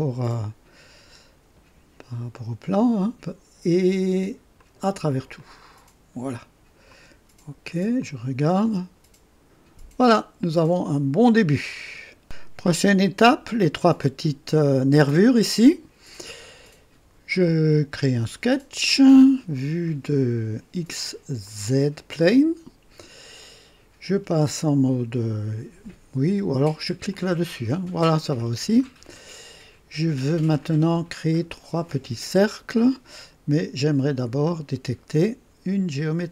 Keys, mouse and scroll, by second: 4.5 click, 5.4 click, 6.9 click, 8.0-11.4 drag, 18.5 click, 19.5-19.9 scroll down 1, 21.4 click, 23.4-23.7 scroll up 1, 27.1 click, 28.2 scroll up 1, 28.8-30.1 right drag, 34.4 click.